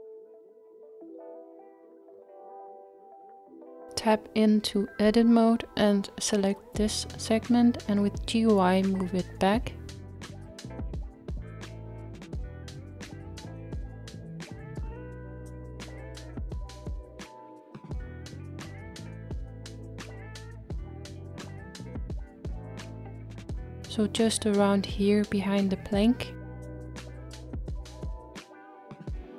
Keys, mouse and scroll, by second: 2.7-3.3 scroll down 1, 3.3-5.9 middle drag, 5.9 click, 6.6-7.0 scroll down 2, 7.0-11.8 middle drag, 11.8-13.9 scroll up 1, 13.9 g, 27.0-29.3 middle drag.